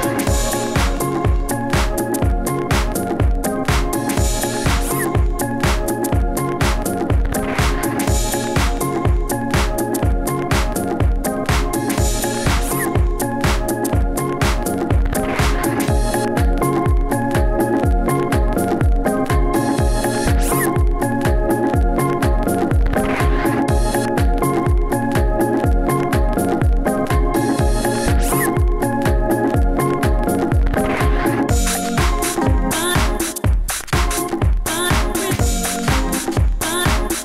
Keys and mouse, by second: 3.2-5.5 drag, 5.5 s, 5.7 s, 6.4 f, 7.1 f, 10.0 s, 10.1 f, 11.2 f, 16.4 s, 16.8 n, 17.0 n, 17.0 t, 18.5 f, 20.5 f, 20.8 Tab, 22.8-25.2 typing, 26.2 f, 26.4 s, 28.3 s, 29.3 f, 30.1 f, 31.3 f, 31.3 s, 33.9 s, 34.7 s.